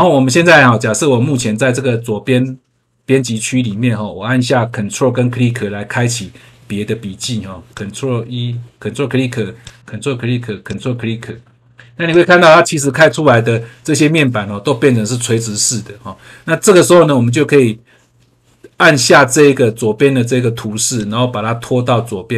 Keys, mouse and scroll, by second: 1.3 click, 7.7 ctrl+click, 9.6 ctrl+click, 10.6 ctrl+click, 12.0 click, 20.9 click.